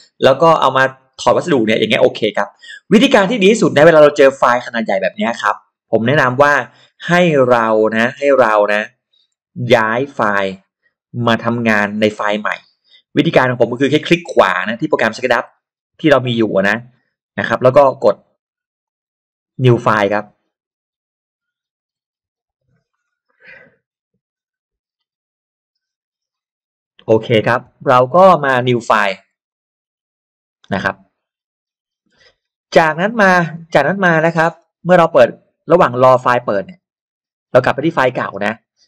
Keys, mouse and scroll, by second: 3.1 scroll up 2, 3.3-3.7 scroll down 4, 4.0-4.7 scroll up 2, 4.4 middle click, 5.2 scroll down 2, 6.0-6.3 scroll down 2, 6.5-7.6 scroll up 4, 7.4 middle click, 13.9 right click, 18.8 click, 29.5 click, 33.7-34.3 scroll up 1, 34.5-34.8 scroll down 1, 37.9 scroll up 1, 38.6 click.